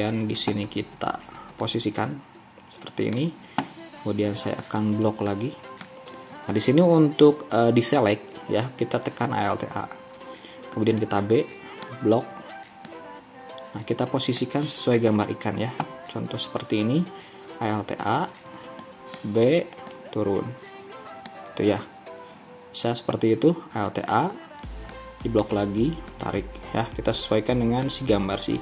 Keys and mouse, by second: 5.1 b, 9.8 alt+a, 11.0 b, 14.1-18.1 drag, 18.1 alt+a, 18.6 b, 21.1 click, 24.0 alt+a, 24.7 b, 27.0-28.6 drag.